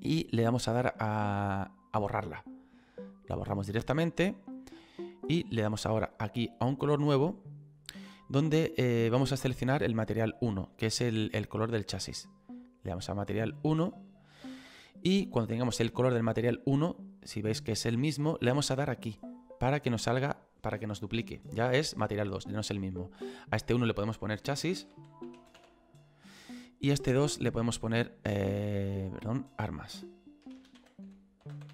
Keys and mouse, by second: 2.5 click, 6.1 click, 12.2 click, 19.3 click, 23.1 click, 26.5 click, 30.5 BackSpace, 30.8 shift+a.